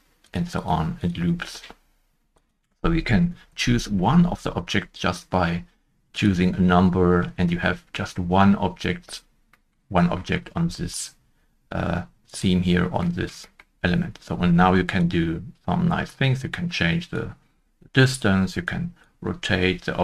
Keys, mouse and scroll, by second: 3.2 1, 3.4 Return, 8.8 Return, 9.1 scroll down 1, 10.1 scroll down 1, 10.1 shift+middle click, 10.4 scroll up 1, 13.0-13.4 scroll up 2, 13.4 middle click, 13.7 shift+middle click, 13.7-14.8 scroll up 1, 14.9 scroll up 1, 15.0 shift+click.